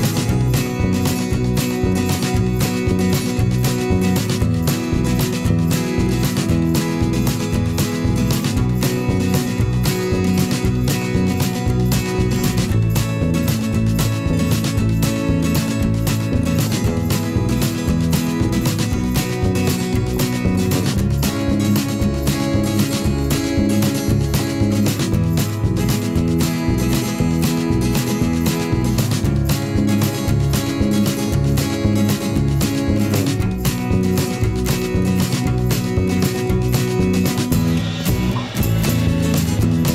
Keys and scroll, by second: 13.8 Return.